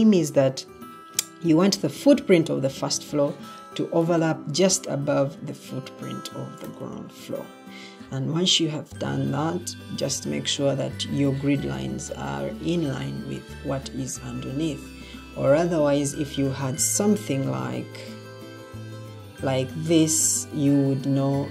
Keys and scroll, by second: 15.9 Escape, 17.3 alt+g, 18.9 ctrl+d, 21.3 Escape.